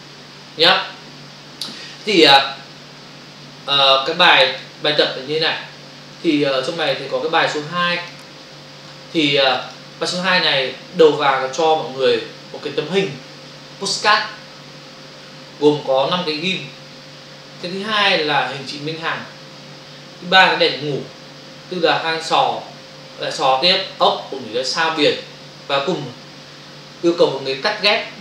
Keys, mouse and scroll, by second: 4.5 click, 6.2 click, 6.4 click, 7.4 click, 7.5 click, 7.8 click, 8.1 click, 9.6 click, 9.7 click, 11.3 space, 17.6 Right.